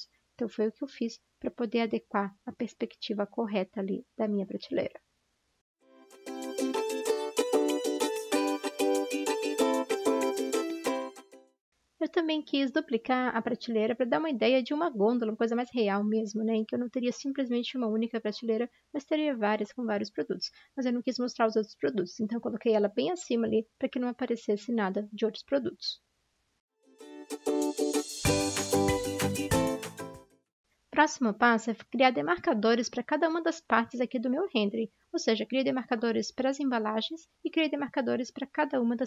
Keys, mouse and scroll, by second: 8.2 ctrl+t, 10.7 ctrl+t, 11.3 ctrl+j, 12.0 ctrl+j, 12.0 v, 20.8 typing, 26.0-28.2 typing, 30.6-32.0 typing, 33.8-35.6 typing, 37.7 typing.